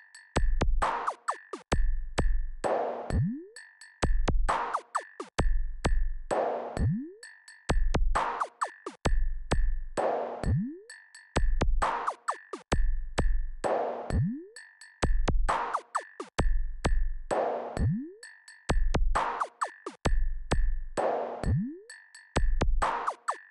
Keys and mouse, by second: 1.1-5.4 drag, 9.1-9.7 drag, 12.2 click.